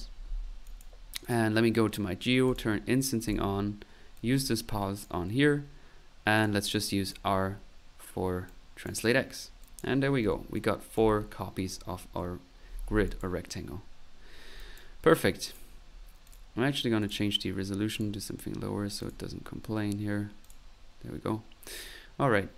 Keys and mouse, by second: 0.7 click, 1.2 click, 2.5 click, 3.3 click, 4.1-5.2 drag, 6.4 click, 7.0 click, 8.5 click, 9.3-10.2 typing, 9.6 click, 10.5 click, 11.8 typing, 12.4 middle click, 13.1 click, 13.9 middle click, 14.3 typing, 14.6 click, 15.4 click, 16.3 click, 17.0 click, 17.9 click, 19.0 click, 20.4 click, 21.0 typing.